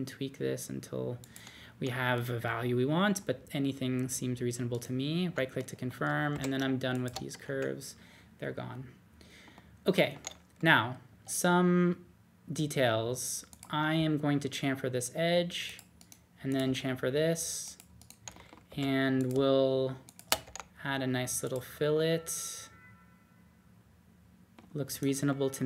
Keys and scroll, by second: 6.3 typing, 7.4 BackSpace, 13.9 c, 16.6 c, 18.7 2, 20.4 d.